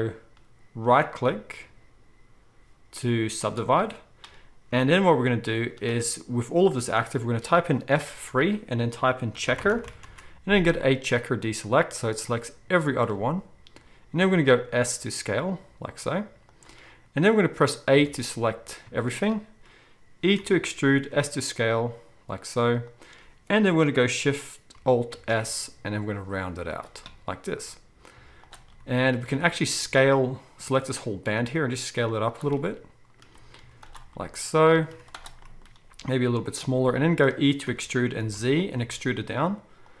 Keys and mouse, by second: 0.8-35.4 right drag, 5.6 z, 7.9 F3, 14.3 s, 18.0 a, 20.4 e, 25.1 alt+shift+s, 28.1 z, 29.3 a, 31.3 s, 33.6 z, 35.2 z, 35.4-40.0 drag, 35.9 s, 37.7 e.